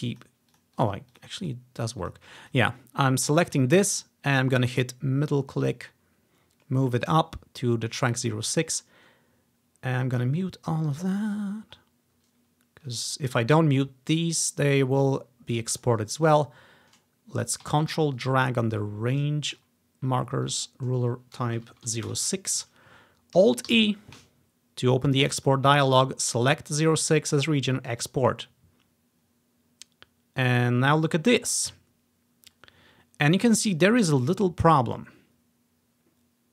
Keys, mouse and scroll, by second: 0.1 click, 0.6 click, 0.9 click, 1.2 click, 1.4 click, 2.1 click, 2.5 click, 3.3 click, 3.5 click, 3.8-4.2 scroll up 1, 4.2-4.7 scroll down 1, 4.9-8.0 middle drag, 8.2 click, 9.4 click, 10.2-11.3 drag, 11.2-11.8 scroll down 1, 11.8 scroll up 1, 12.2 scroll down 1, 13.1-14.1 scroll down 1, 14.7-15.4 scroll up 1, 15.4 scroll down 1, 15.8 click, 16.4 click, 18.3-19.6 ctrl+drag, 20.5-21.9 drag, 21.7 0, 22.0 6, 22.2 Return, 23.8 alt+e, 25.5 click, 26.5 click, 26.9 click, 28.0 click, 28.3-29.4 drag.